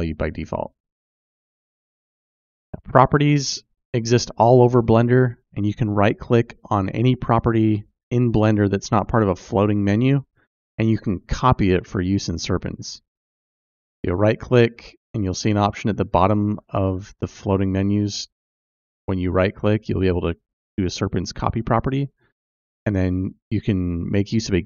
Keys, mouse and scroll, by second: 1.1 click.